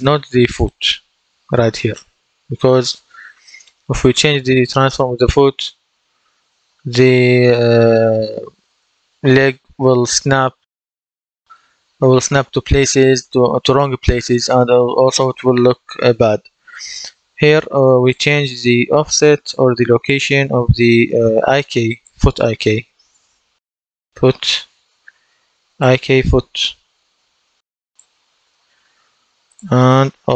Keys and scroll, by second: 22.9-24.3 typing, 30.2 ctrl+d.